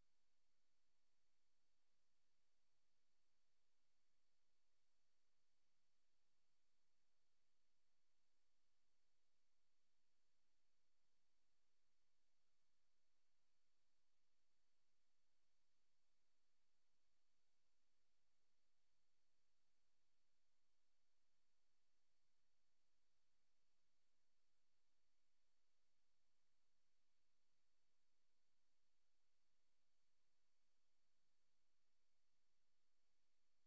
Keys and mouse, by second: 0.1 click, 0.4 click, 0.7 click, 1.7-2.4 typing, 2.6 ctrl+z, 4.3 click, 6.3 click, 7.4 click, 8.4 click, 9.5 click, 10.2 click, 10.7 click, 11.0 click, 11.5 click, 11.8 click, 12.4 click, 13.3 click, 13.9 click, 14.3 click, 14.8 click, 16.0 click, 20.8 click, 21.1 click, 21.4 click, 21.7 click, 21.9 click, 22.2 click, 24.1 click, 25.8 click, 26.3 click, 27.3 click, 31.0 Right, 31.7 click, 33.0 click.